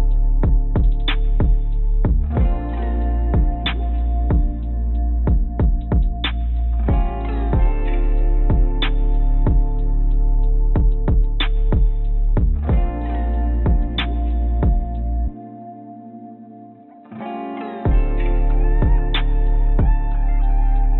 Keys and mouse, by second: 0.4 BackSpace, 4.1-5.8 drag, 8.5 click, 9.1 click, 9.6 click, 9.8 click, 20.8 g.